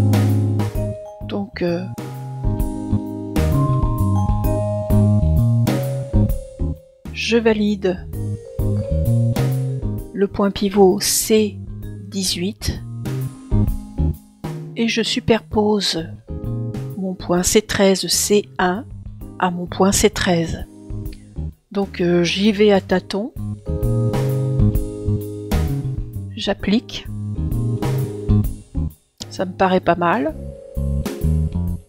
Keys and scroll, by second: 1.5 super+Return, 23.8 BackSpace.